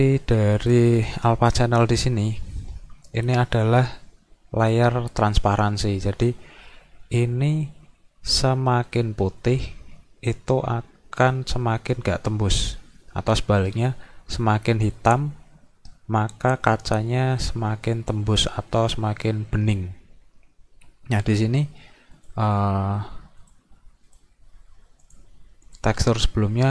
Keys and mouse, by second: 0.6 click, 1.5 click, 4.6 click, 22.2 click, 23.4 click, 24.1 click, 25.0 click, 25.7 click.